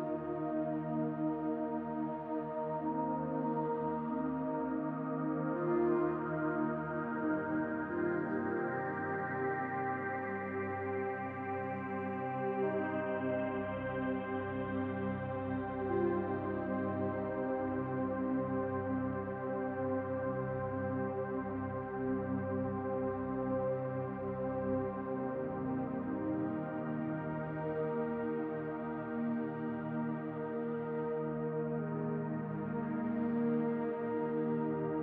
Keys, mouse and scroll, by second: 5.8 alt+shift+click, 9.9 alt+shift+click, 18.0 alt+shift+click, 22.4 alt+shift+click, 28.3 ctrl+shift+r, 33.5 click, 34.4 alt+shift+click.